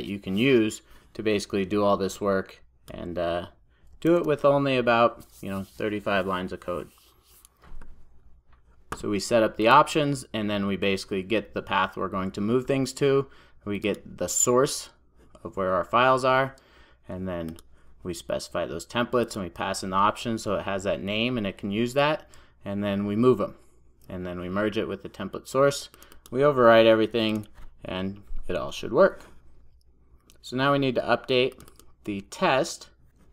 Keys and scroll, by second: 4.2 super+s.